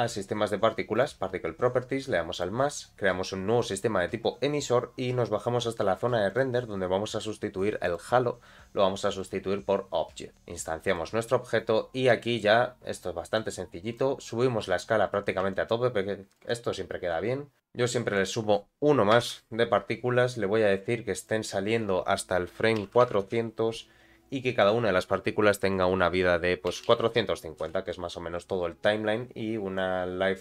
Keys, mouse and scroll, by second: 0.9 click, 2.3 click, 5.1 scroll down 2, 6.3 click, 6.7 scroll down 1, 7.8-9.3 drag, 9.5-10.3 scroll down 3, 10.3 click, 11.9 scroll up 2, 12.2 shift+middle click, 13.3 click, 15.5 shift+click, 16.7-17.1 scroll up 2, 17.6-20.3 drag, 17.6-19.5 scroll up 4, 21.1-24.3 drag, 23.0 0, 24.6-29.1 drag, 29.7 click.